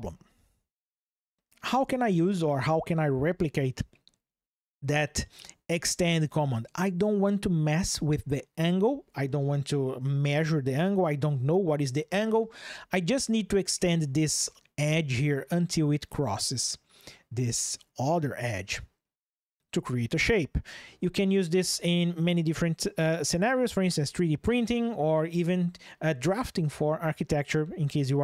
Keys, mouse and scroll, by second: 0.8 shift+click.